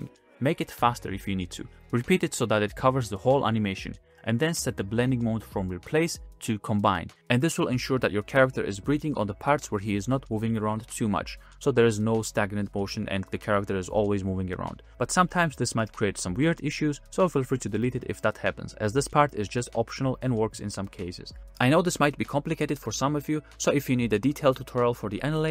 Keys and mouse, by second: 0.6 g, 1.4 g, 1.9 click, 2.9-3.3 middle drag, 4.7 middle click, 5.5-6.7 middle drag, 8.1-10.5 middle drag, 11.2 middle click, 11.8 space.